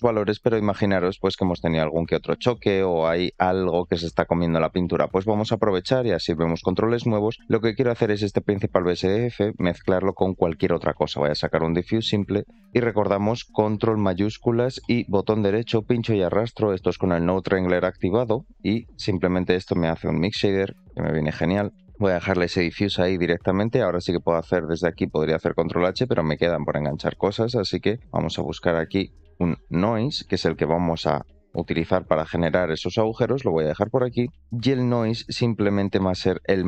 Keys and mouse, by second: 0.9 middle drag, 3.1 middle drag, 3.4 shift+middle drag, 5.4 shift+middle click, 6.1 click, 7.0-7.4 middle drag, 7.4 click, 9.0 middle click, 12.5 shift+middle click, 20.4 click, 20.5 click, 21.8 shift+middle click, 23.6 click, 25.3 click, 26.3 shift+middle click, 35.0 click, 36.1 middle click.